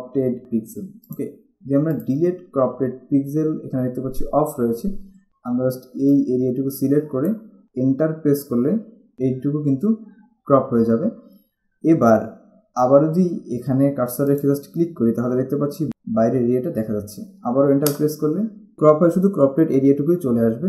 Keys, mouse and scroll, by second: 1.3 click, 5.3 z, 6.3 click, 14.4 click, 18.0 Return.